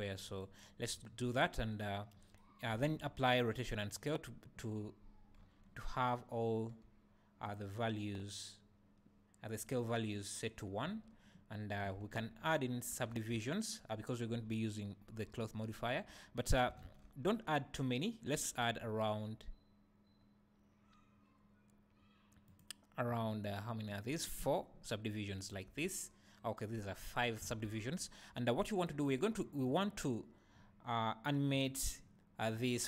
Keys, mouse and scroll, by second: 0.0 `, 0.9 `, 2.2 scroll down 2, 2.8 ctrl+a, 5.4 n, 6.9 t, 7.5 click, 10.9 t, 12.0 n, 13.1 Tab, 15.9 ctrl+t, 16.9 ctrl+z, 18.3 ctrl+r, 23.2 right click, 26.9 `, 27.5 alt+a, 28.0 `, 29.6 click, 31.5 click.